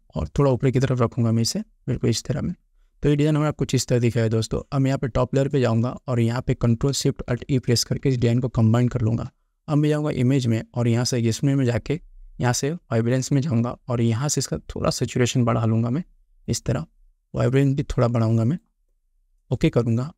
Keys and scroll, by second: 8.2 ctrl+alt+shift+e.